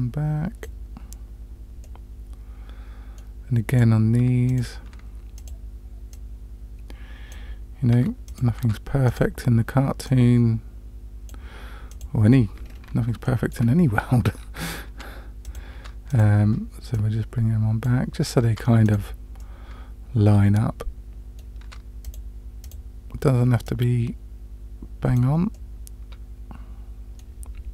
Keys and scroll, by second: 4.2 Tab, 4.9 Tab, 8.6 Tab, 14.9 Tab, 15.8 Tab, 18.4 Tab, 21.7 Tab.